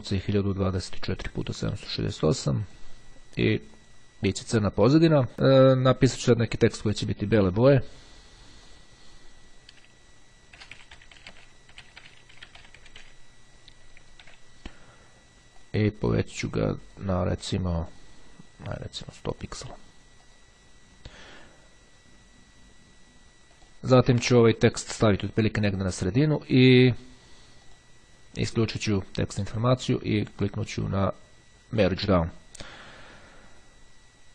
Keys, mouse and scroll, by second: 1.3 click, 2.7 click, 3.5-4.5 drag, 7.6 click, 8.6 click, 10.7-13.6 typing, 13.8 ctrl+a, 15.5-16.7 drag, 17.3 click, 19.2-20.3 drag, 23.2-24.3 drag, 25.2-26.6 drag, 27.8 right click, 29.1 click, 30.5 right click, 31.8 click.